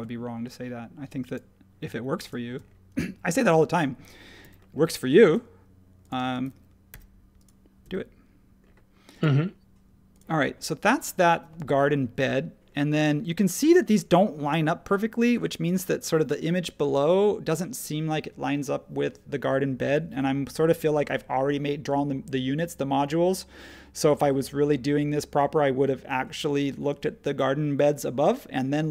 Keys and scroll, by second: 4.4 m, 6.2 space, 6.9 r, 7.8 Escape.